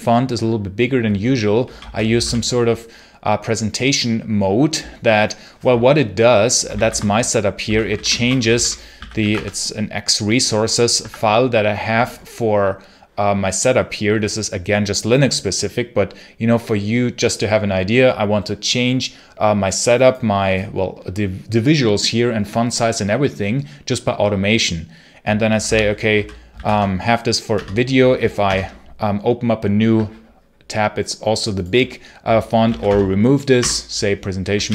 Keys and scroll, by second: 1.3-2.5 typing, 6.6 ctrl+c, 7.3-9.6 typing, 10.8 Tab, 25.6 ctrl+c, 25.6-26.9 typing, 27.4 Return, 28.3 super+Return, 32.4 p, 32.6 o, 32.7 space, 33.4 Return.